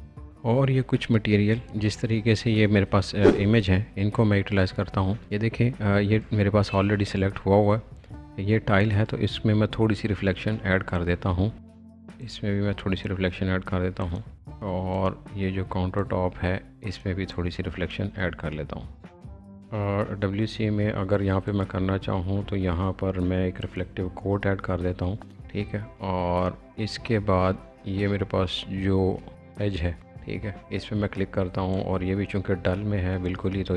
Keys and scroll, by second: 11.6 alt+b.